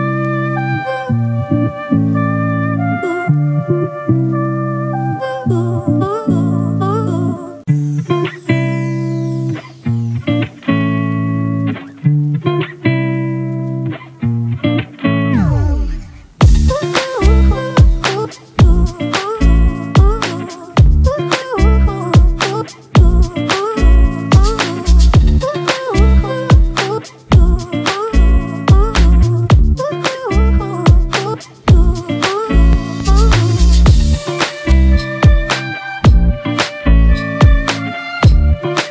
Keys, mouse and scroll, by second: 5.5 Return, 7.3 ctrl+t, 12.3 Left, 12.4 Up, 12.8 Up, 13.1 Left, 13.2 Left, 14.0 Return.